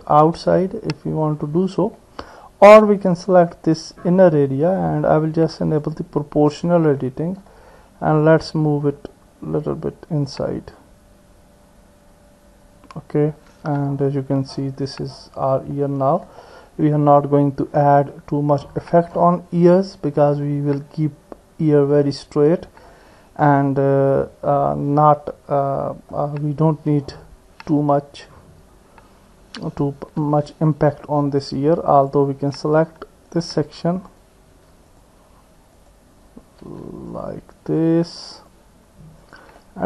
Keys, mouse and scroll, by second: 1.1 middle click, 2.0 middle click, 2.1 click, 2.2 middle click, 4.6 middle click, 5.8 click, 7.0 middle click, 8.4-13.0 drag, 13.6 Tab, 14.0-15.1 middle drag, 15.8 middle click, 16.8-19.0 middle drag, 19.8 middle click, 21.9 middle click, 23.5 middle click, 24.7-26.1 middle drag, 30.2 Tab, 30.7 middle click, 37.1 shift+click, 38.4 shift+click, 39.6 middle click.